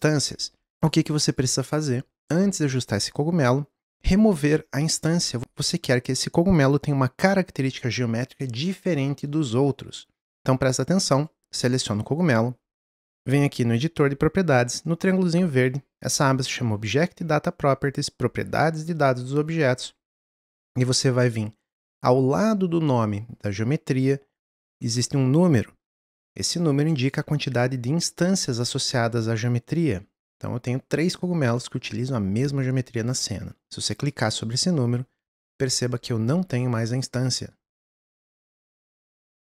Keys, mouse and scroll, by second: 0.8 Tab, 0.8 click, 1.3 click, 19.5 click, 33.9-36.5 drag, 36.5 Tab, 37.0 click, 38.6 ctrl+z, 39.1 Tab.